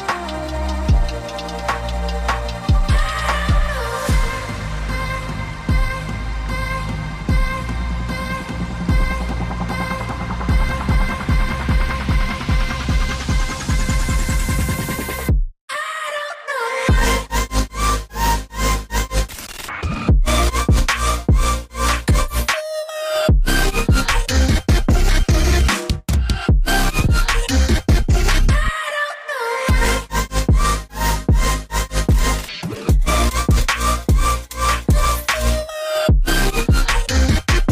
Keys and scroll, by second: 0.5 Escape, 1.1 typing, 1.2 Return, 2.3-3.1 typing, 3.8 Escape, 4.2 typing, 5.5 typing, 8.5 ctrl+2, 8.9 g, 15.1 v, 16.8 a, 17.7 g, 18.5 v, 22.4 Escape, 22.5 ctrl+z, 24.5 Escape, 26.9 typing, 27.0 Tab, 28.2 typing, 28.3 Return, 29.3 typing, 29.4 Return, 30.3 a, 30.4 g, 35.8 v, 37.0 ctrl+alt+2.